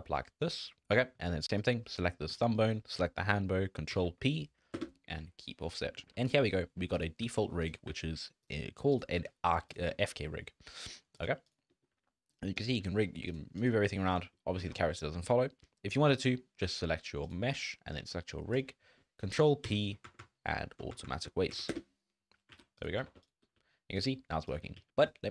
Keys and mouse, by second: 1.5 click, 2.4 shift+click, 3.9 ctrl+p, 5.8 click, 6.0 a, 6.1 ctrl+Tab, 6.5 click, 7.2 g, 7.9 r, 9.1 g, 9.9 shift+middle drag, 10.3-10.9 drag, 11.4 click, 11.7 click, 11.9 r, 12.8 r, 13.6 click, 13.7 r, 14.3 drag, 14.7 ctrl+Tab, 14.9 drag, 15.2-15.5 drag, 15.6 drag, 15.9 drag, 19.6 ctrl+p, 20.2 Down, 21.0 Down, 21.2 Down, 22.5 alt+a, 23.1 ctrl+Tab, 23.2 drag, 23.5 r, 24.6 r, 24.9 ctrl+Tab.